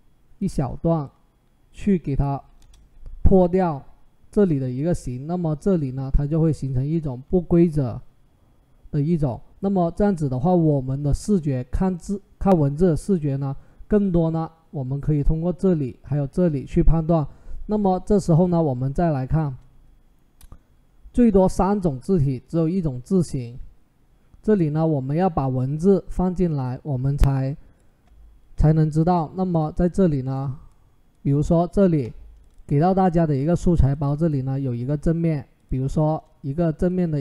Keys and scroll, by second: 2.3 Return.